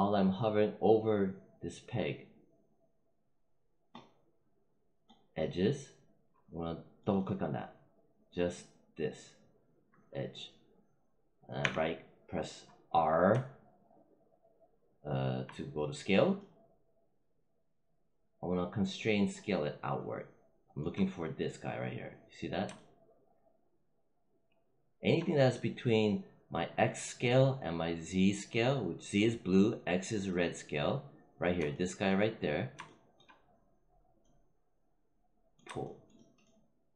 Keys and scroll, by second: 11.5 r.